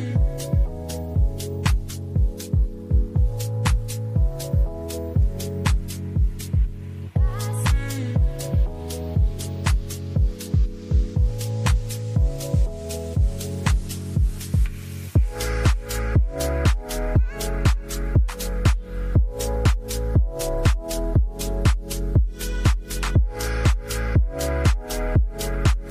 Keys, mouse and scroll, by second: 2.6-3.0 drag, 3.8-5.2 middle drag, 9.5-10.2 middle drag, 13.6 middle click, 14.6 middle click, 21.4 click, 22.1-25.5 drag.